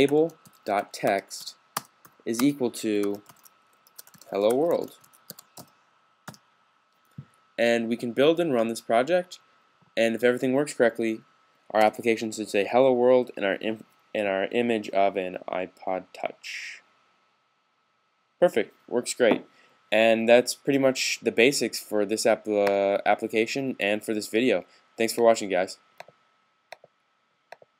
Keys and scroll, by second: 0.0-6.1 typing.